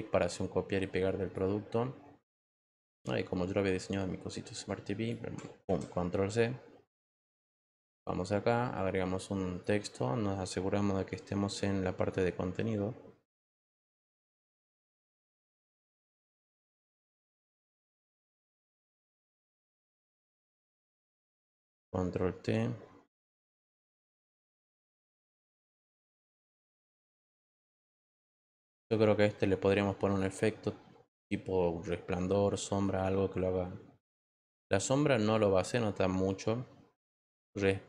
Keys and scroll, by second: 5.6 ctrl+c, 14.9 ctrl+v, 21.5 ctrl+t, 27.8 Return.